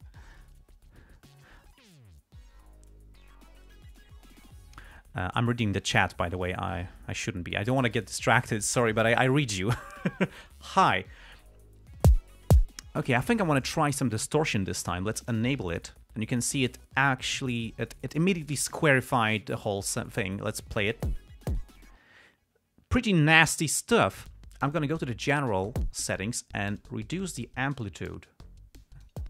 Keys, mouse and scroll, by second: 3.2 click, 15.6 click, 25.0 click, 27.1-29.2 drag.